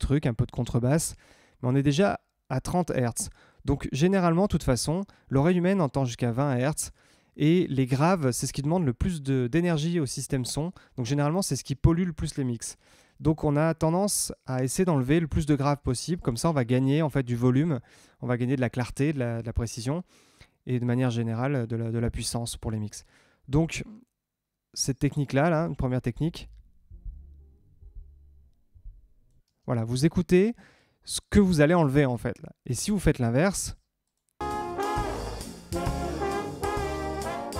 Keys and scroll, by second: 25.5 space, 29.3 space, 34.3 space.